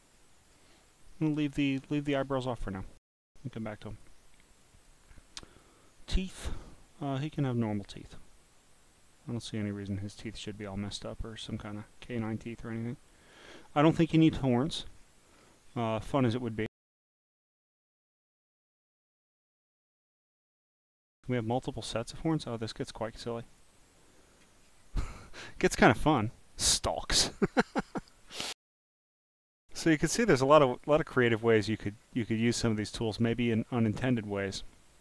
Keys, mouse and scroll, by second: 0.1-1.0 scroll, 3.9 click, 4.6 click, 5.5 click, 6.1 click, 11.3 click, 13.1 click, 13.8-14.4 scroll down 2, 15.0 scroll up 7, 15.4-15.9 scroll down 6, 17.0 click, 19.0 click, 21.4 click, 22.4 click, 23.3 click, 26.1 click, 27.1 click, 27.8-28.6 scroll down 9, 30.7 click, 31.5 scroll down 5, 33.0 click, 34.0 scroll up 1.